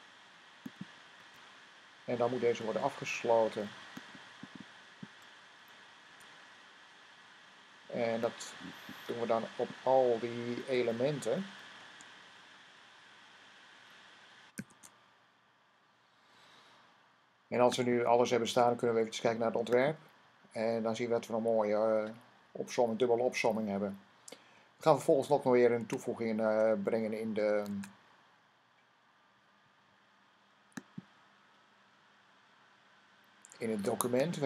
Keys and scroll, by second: 1.0 v, 6.0 c, 10.4 v, 14.4 super+v, 25.7 Tab, 27.6 super+Tab.